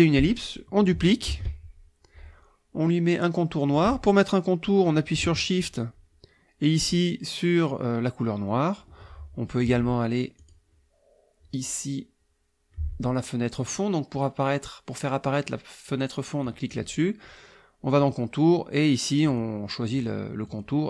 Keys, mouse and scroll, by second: 1.3 ctrl+d, 5.6 shift+click, 10.4 click, 16.4 click, 18.0 click, 19.2 click, 19.9 click, 20.5 click.